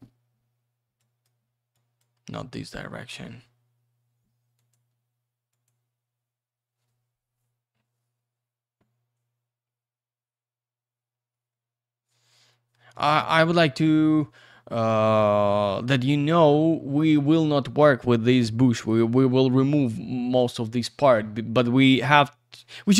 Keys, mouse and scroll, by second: 1.0 click, 1.7 click, 4.5 click, 5.5 click, 9.5-10.7 scroll up 1, 11.3-13.0 scroll down 1, 15.6-16.2 scroll up 1, 16.2-17.5 scroll down 1.